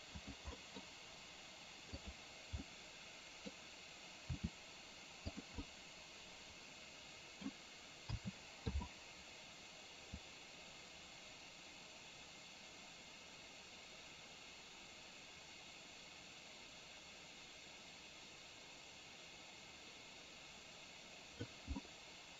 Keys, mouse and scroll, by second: 0.7 scroll up 1, 0.8 scroll down 1, 2.0 click, 2.7-3.7 middle drag, 4.4 r, 5.7-7.5 middle drag, 8.3 a, 8.8 i, 10.3-21.7 drag, 21.9-22.3 middle drag.